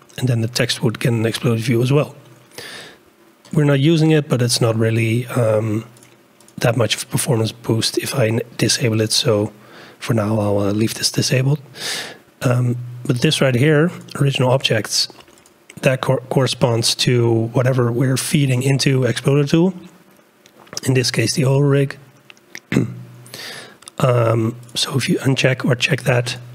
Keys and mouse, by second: 6.0-10.9 drag, 14.0 click, 24.7 click, 26.3 click.